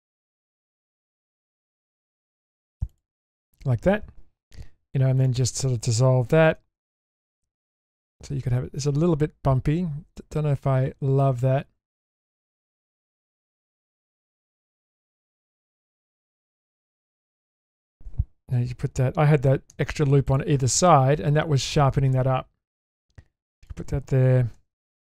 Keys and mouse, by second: 2.9 click, 4.7 2, 6.7 ctrl+x, 7.6 Tab, 8.3-11.2 middle drag, 11.8 Tab, 12.2-12.8 middle drag, 13.2 click, 13.6 ctrl+z, 13.8 ctrl+z, 14.0 ctrl+z, 14.3 ctrl+z, 14.3 ctrl+z, 14.5 ctrl+z, 14.6 ctrl+z, 15.1 ctrl+z, 16.3-16.7 shift+middle drag, 17.5 shift+middle click, 19.7 ctrl+r, 24.6 ctrl+r.